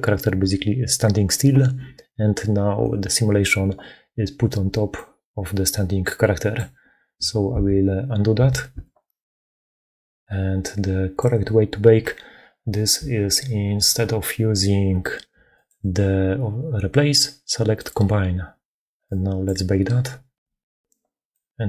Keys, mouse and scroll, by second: 2.7 click, 2.9-4.8 middle drag, 4.8-6.4 drag, 7.4 ctrl+z, 8.3 ctrl+z, 8.6 ctrl+z.